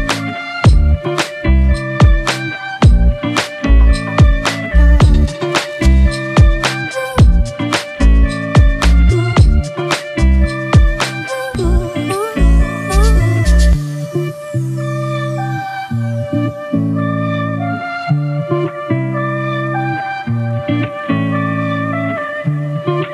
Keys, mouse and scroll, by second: 7.1 alt+BackSpace.